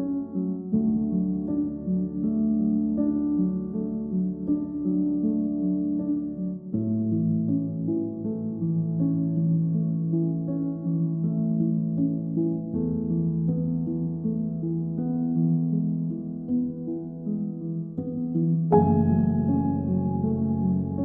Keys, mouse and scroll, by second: 0.1-1.5 drag, 4.6 ctrl+s, 6.4 click, 7.5-7.9 scroll down 1, 7.9-8.9 middle drag, 8.9-9.5 drag, 14.4-15.5 drag, 15.5 ctrl+s, 15.7-16.7 middle drag, 16.7-21.0 drag.